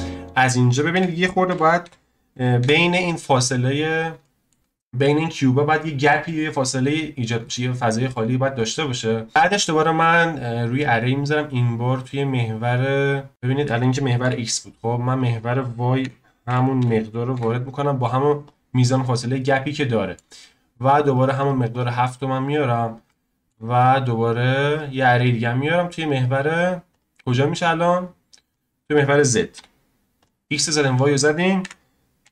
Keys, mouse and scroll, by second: 0.1-3.2 drag, 3.6-4.2 scroll up 5, 4.2-4.9 shift+middle drag, 4.9-7.1 scroll down 1, 7.1 scroll down 2, 7.5-8.6 middle drag, 8.6 click, 8.9-9.3 scroll down 2, 9.3-9.7 scroll up 2, 9.7-14.7 drag, 15.1-18.3 drag, 19.4-21.1 middle drag, 21.1-23.1 drag, 23.1-24.7 shift+middle drag, 24.7-28.2 drag, 28.4-30.2 drag, 30.9-32.3 drag.